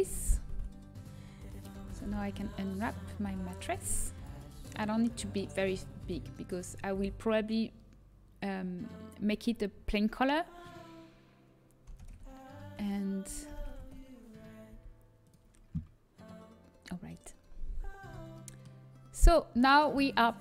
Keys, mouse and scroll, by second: 0.8 a, 3.0 l, 3.0 e, 3.8 s, 4.3 g, 6.0 r, 16.0 r, 16.0 g, 18.2 a.